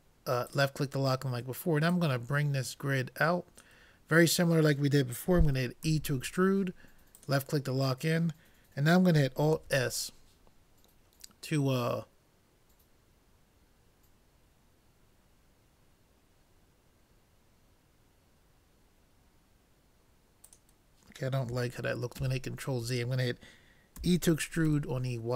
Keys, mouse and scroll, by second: 1.9-3.7 drag, 5.9 e, 9.6 alt+s, 22.2 ctrl+z, 24.0 e.